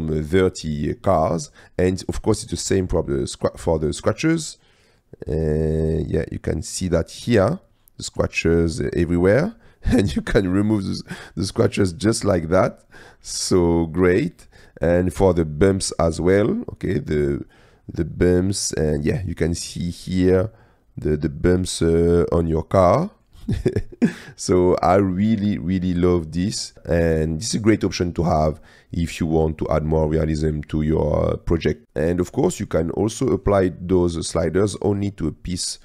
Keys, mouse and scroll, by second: 2.7-4.2 drag, 4.5-5.0 drag, 5.8-6.6 drag, 7.6 click, 9.4-9.9 drag, 11.0 click, 12.0 middle drag, 12.1-12.7 drag, 13.4-14.2 drag, 14.2 middle click, 15.9-18.1 drag, 18.1-19.2 middle drag, 19.9-20.5 drag, 20.5-21.2 middle drag, 22.2-22.5 middle drag, 22.5-23.2 drag, 23.2 middle click, 27.7 middle click, 29.7-30.6 drag, 32.9-33.5 shift+middle drag.